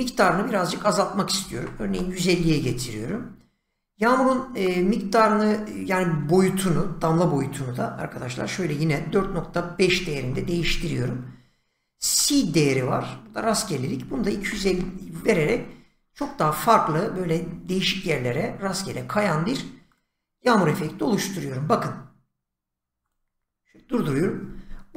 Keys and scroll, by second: 1.4-2.1 typing, 8.6-10.3 typing, 13.8-15.0 typing.